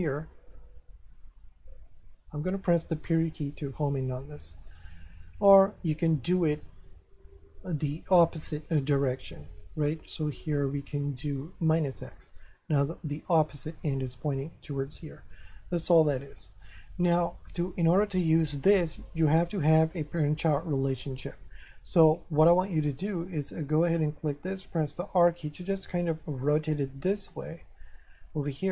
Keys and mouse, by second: 1.5 middle click, 3.2 KP_Decimal, 4.9 middle click, 6.0 middle click, 8.5 ctrl+n, 11.9 click, 17.0 ctrl+n, 21.7 middle click, 23.7 right click, 24.9 r, 26.2 click, 26.3 shift+click, 26.6 shift+middle click, 28.4 middle click.